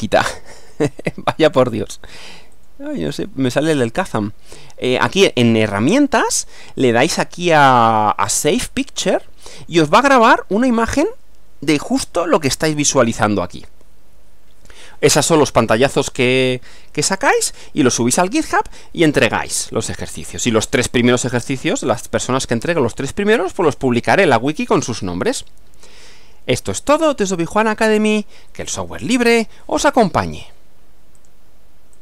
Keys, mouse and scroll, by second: 0.7 click, 1.5 click, 2.5 click, 3.1 click, 3.8 click, 10.7 click, 31.2 click, 31.9 click.